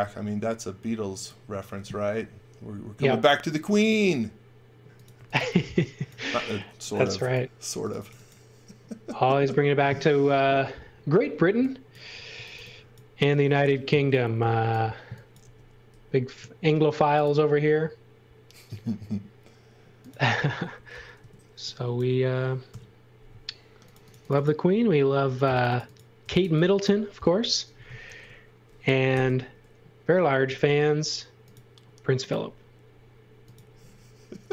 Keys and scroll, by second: 4.9-6.1 typing, 12.1-14.0 typing, 15.4 m, 21.2 space, 22.7 Delete, 26.0-26.9 typing, 28.0 shift+3, 29.1 r.